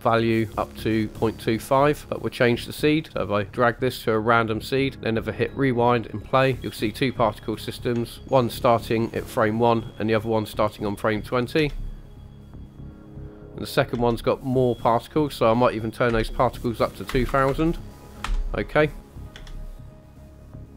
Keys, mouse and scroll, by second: 1.1-1.7 scroll down 3, 1.7-3.1 scroll up 1, 3.1 click, 3.1-3.5 scroll up 1, 5.3 click, 6.2-7.1 scroll down 1, 7.2-7.8 shift+middle drag, 9.0 scroll up 2, 11.6 space, 13.9 space, 15.3-18.2 drag, 17.3 KP_0, 19.1 click, 19.3 space.